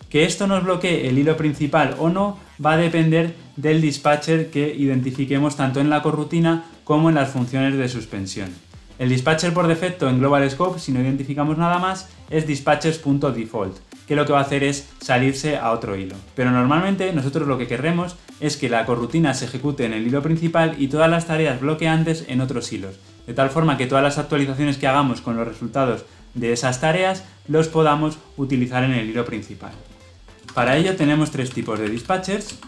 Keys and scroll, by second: 0.0 ctrl+v, 30.3 ctrl+shift+z, 32.4 Return.